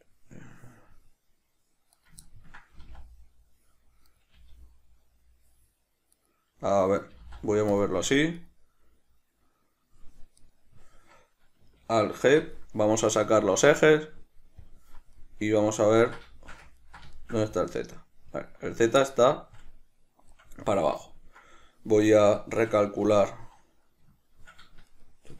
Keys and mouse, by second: 2.3 right click, 2.5-4.4 ctrl+middle drag, 3.1 g, 4.4 right click, 4.6 g, 6.5 right click, 7.4 g, 8.1 click, 8.7 right click, 10.6 right click, 12.4 alt+g, 14.8 click, 15.4-22.6 middle drag, 22.6 shift+right drag, 23.3 Tab, 25.1 shift+right click.